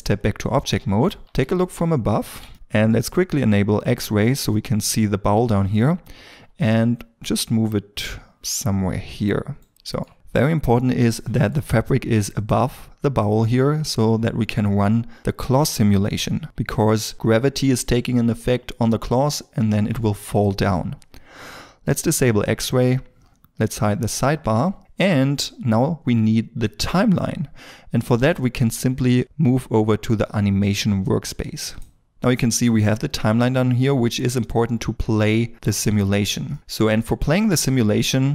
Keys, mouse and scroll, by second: 1.2 KP_7, 4.5-5.1 scroll up 1, 6.3 g, 9.7 shift+middle click, 11.2 shift+middle click, 11.2 shift+middle click, 23.7 n, 36.5 middle click, 37.2-38.3 scroll.